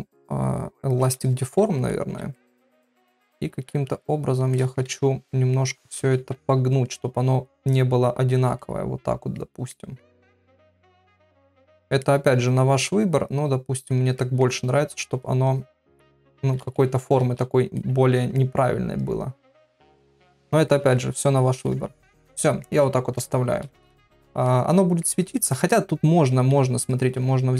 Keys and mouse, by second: 1.0 click, 1.6-2.4 ], 2.4 middle click, 4.1 click, 4.6 middle click, 4.9 ctrl+z, 5.3 click, 6.0 ctrl+z, 7.5 click, 8.6 middle click, 9.7 middle click, 10.5 middle click, 11.3 click, 12.0 middle click, 13.4 click, 14.2 middle click, 14.8 click, 15.5 click, 16.6 ctrl+z, 17.2 ctrl+z, 17.8 middle click, 19.0 click, 19.9 middle click, 20.4 ctrl+middle click, 20.7 middle click, 21.7 ctrl+r, 22.1 middle click, 23.2 KP_Divide, 23.9-25.0 ctrl+middle drag, 25.4 ctrl+middle click, 25.7 middle click.